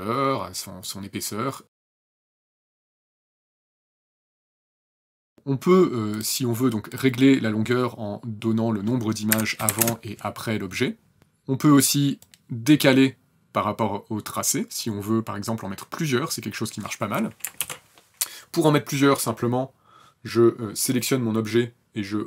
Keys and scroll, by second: 8.6 KP_Subtract, 9.0 KP_4, 9.1 KP_Enter, 16.9 ctrl+z.